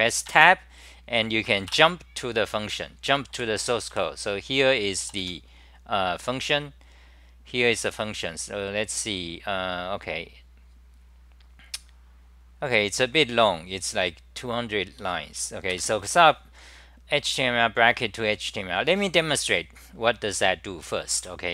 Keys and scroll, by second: 0.2 Tab, 2.0 Return, 3.4 3, 3.9 1, 6.2-13.9 scroll up 57, 13.9-14.8 scroll up 6, 15.7 ctrl+g, 16.3-21.5 c, 21.2 w.